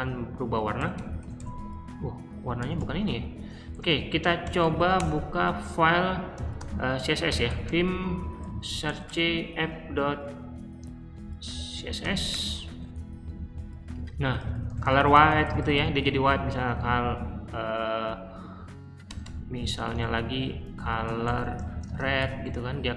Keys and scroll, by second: 0.3 Escape, 0.5-5.2 typing, 6.3-9.2 typing, 11.3 Right, 11.4-12.3 typing, 13.6-17.2 typing, 19.0-22.9 typing.